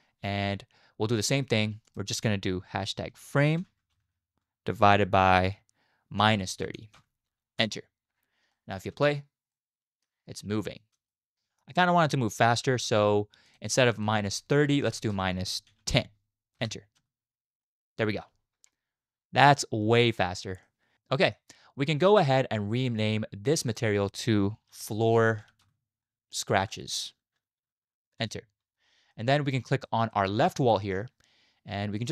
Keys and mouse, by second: 2.0-7.7 drag, 8.5 middle drag, 8.6 click, 8.6 right click, 8.9 space, 9.5-10.0 drag, 11.1 shift+drag, 11.3 middle drag, 12.1-12.5 middle drag, 12.7 space, 13.5-16.6 drag, 15.1 BackSpace, 17.0 space, 17.6-18.2 drag, 17.6-18.2 middle drag, 17.6-18.2 right drag, 20.6-20.9 middle drag, 20.9 space, 21.0 middle click, 23.7-28.3 drag, 25.3 o, 29.1-29.7 middle drag, 29.9 shift+middle drag, 30.1 middle click, 30.6 click.